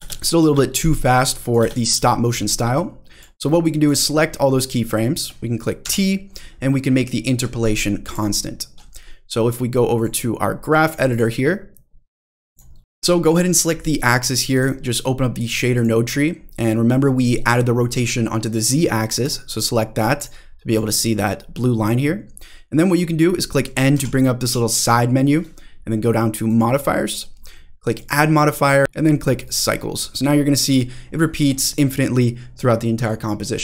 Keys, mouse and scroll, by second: 0.0 space, 0.4 space, 1.3 drag, 1.6 space, 1.9 space, 2.7-3.2 drag, 3.6 click, 5.8 t, 9.9-10.9 drag, 11.1-12.6 drag, 14.5 drag, 15.7 drag, 19.2 click, 20.0 click, 20.2 click, 20.7 click, 23.9 n, 24.4 n, 26.5 click, 27.9-29.5 drag, 30.7-31.6 scroll down 6, 31.7 click, 31.7-32.2 scroll up 3, 31.7 space.